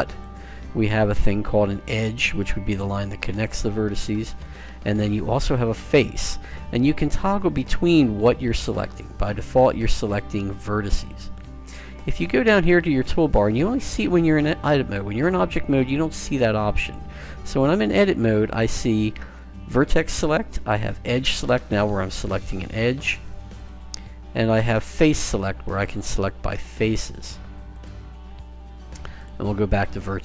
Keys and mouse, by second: 2.1-9.6 middle drag, 9.6-12.4 right drag, 15.3 click, 17.5 click, 20.7 click, 21.8 right click, 22.4 middle click, 22.5-25.3 right drag, 25.1 click, 25.4 click, 26.7 click, 29.6 click.